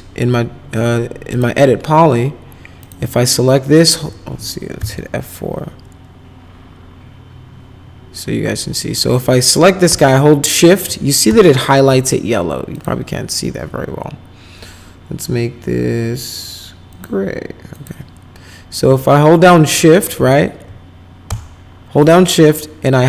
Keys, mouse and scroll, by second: 1.3 click, 2.8 click, 4.8 F4, 9.3 click, 12.7 click, 16.8 click, 17.7 click.